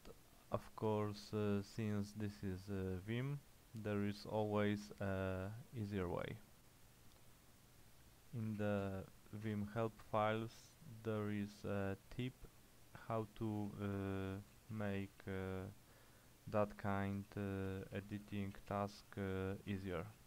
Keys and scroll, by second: 8.3-9.4 typing, 9.5 Return, 12.5 ctrl+j, 13.1 ctrl+k, 13.6 ctrl+j, 14.6 ctrl+k, 15.1 ctrl+k, 15.3 ctrl+k, 15.6 ctrl+k, 17.1-20.2 typing.